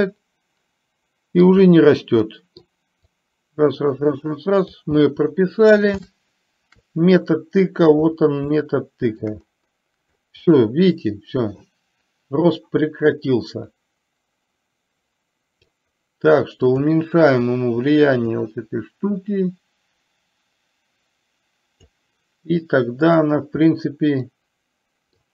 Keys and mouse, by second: 0.2-1.6 middle drag, 2.3 middle click, 3.3-4.8 drag, 5.0-5.7 middle drag, 6.1-7.8 shift+middle drag, 8.6-9.2 shift+middle drag, 10.6-11.7 middle drag, 12.7-15.7 drag, 16.7 click, 18.5-22.0 drag, 23.2 drag, 23.7-25.3 middle drag.